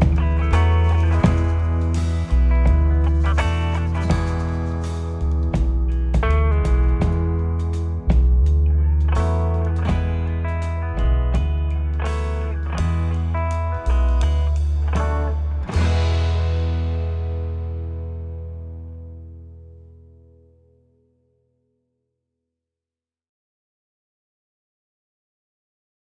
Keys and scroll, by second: 1.3 p, 1.8 ctrl+z, 5.7 p, 6.5 ctrl+F1, 9.0 ., 12.2 ,, 14.1 ctrl+z, 15.3 ctrl+z, 16.1 ctrl+z.